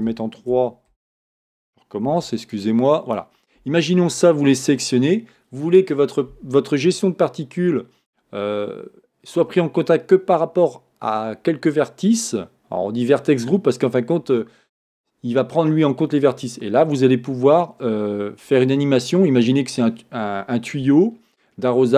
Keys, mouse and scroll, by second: 2.3 c.